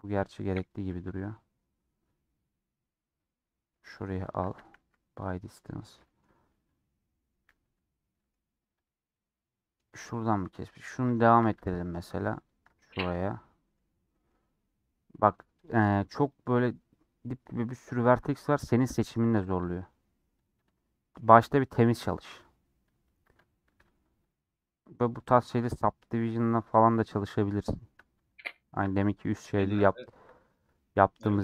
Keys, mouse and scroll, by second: 5.4 scroll down 1, 5.6-7.7 middle drag, 7.7 2, 8.0 middle click, 8.8 click, 9.0 middle click, 9.9-10.4 scroll up 1, 10.6-12.5 middle drag, 12.5 ctrl+click, 13.1 middle click, 13.7 scroll up 2, 14.0 middle click, 14.6-15.0 scroll up 1, 15.6-18.6 drag, 19.1 shift+middle click, 20.0 ctrl+click, 20.5 ctrl+click, 20.7 middle click, 21.6 ctrl+click, 22.1 ctrl+click, 22.2-24.4 middle drag, 24.4 ctrl+click, 25.3 ctrl+click, 27.0 scroll down 2, 27.2-28.4 middle drag, 28.4 ctrl+click, 28.6 shift+middle click, 29.3 ctrl+click, 29.5 shift+middle click, 29.9-30.4 scroll up 2, 30.6 scroll down 2, 30.9-31.4 middle drag.